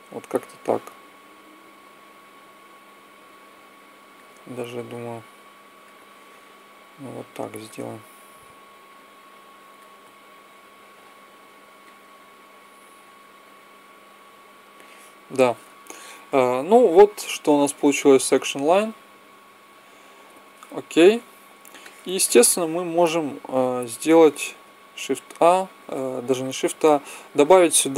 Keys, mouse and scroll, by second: 1.2-2.4 drag, 5.1-8.2 drag, 8.8-11.0 drag, 11.7-13.5 drag, 17.6 alt+a, 20.1 Escape, 24.8 shift+a.